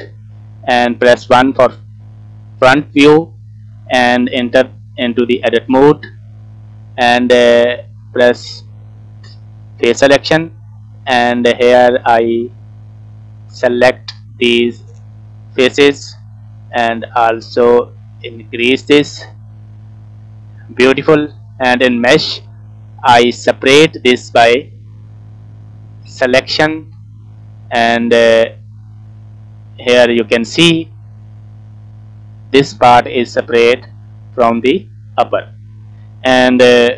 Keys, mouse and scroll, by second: 0.9 KP_1, 2.5 shift+middle click, 3.6-3.9 scroll up 1, 3.9-5.0 scroll down 1, 5.4 Tab, 6.4 click, 8.4 click, 13.9-15.2 drag, 17.0-18.4 shift+drag, 19.3 scroll down 2, 19.5 middle click, 22.0-26.3 drag, 28.6 click, 29.1 middle click, 30.0 Tab, 30.3-30.7 scroll up 3, 30.7 scroll down 2, 30.8 middle click, 31.7 click, 32.0 click, 33.1 middle click, 33.6 click, 34.3-35.8 middle drag.